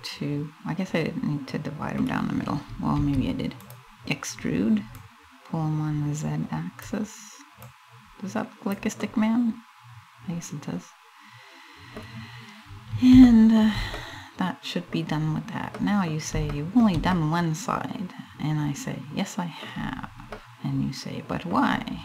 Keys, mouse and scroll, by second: 2.6 e, 3.3 click, 4.6 click, 7.2 click, 8.6 middle click, 12.8 shift+middle click, 13.5 middle click, 15.3 middle click, 16.2 shift+middle click, 16.8 middle click, 20.0 middle click.